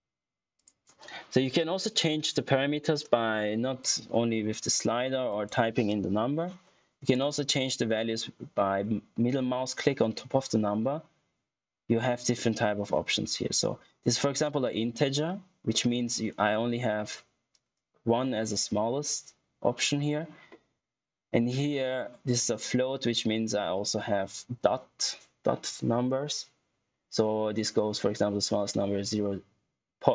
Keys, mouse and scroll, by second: 3.7 click, 10.6 middle click, 15.6 middle click, 20.7 middle click.